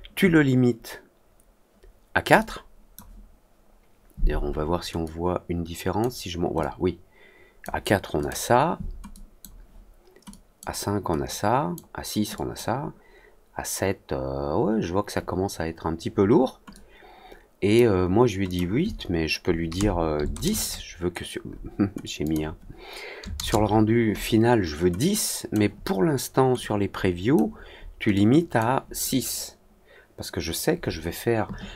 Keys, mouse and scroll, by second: 2.3-2.9 drag, 5.0 click, 6.5-7.5 drag, 8.1 click, 9.0 click, 10.2 click, 11.2 click, 12.3 click, 16.6-17.7 drag, 18.4 click, 22.1 click, 24.9 click, 26.5 click, 28.1 click.